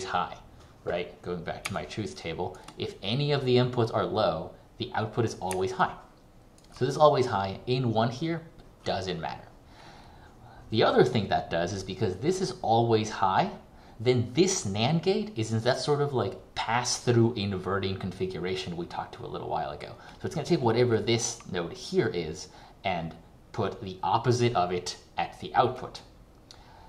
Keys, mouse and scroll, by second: 1.8 ctrl+click, 6.0 ctrl+click.